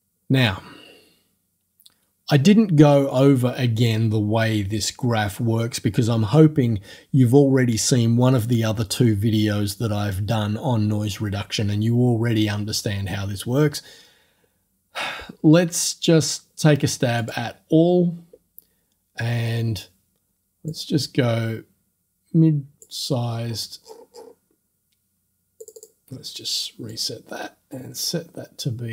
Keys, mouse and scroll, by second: 17.2 click, 20.7-23.0 drag, 23.2-23.8 scroll up 2, 23.8-24.5 scroll down 2, 24.5-24.9 scroll up 2, 25.6 click, 26.9-28.9 drag.